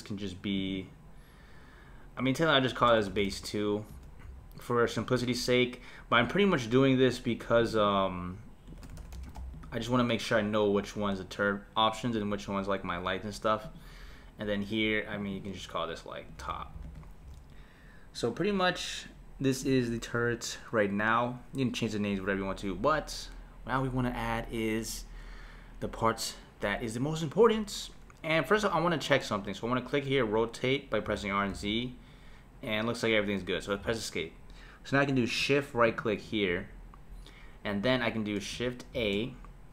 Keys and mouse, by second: 0.5 click, 0.8-3.9 drag, 6.3 click, 7.6 click, 7.8-10.8 drag, 13.6 click, 15.1-18.5 drag, 19.6 click, 28.7 click, 31.1 r, 35.8 shift+right click, 37.0 shift+Right, 39.1 shift+a.